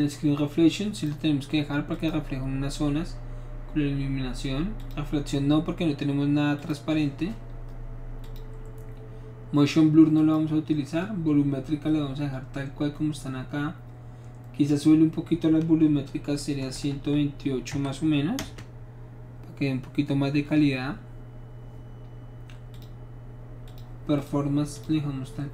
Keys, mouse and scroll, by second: 1.0 click, 1.9 click, 4.8 click, 6.6 click, 8.2 click, 10.2 click, 14.7 click, 16.7 KP_1, 16.7 KP_2, 17.7 KP_8, 18.4 Return, 22.7 click, 23.7 click, 24.2 click, 24.7 click.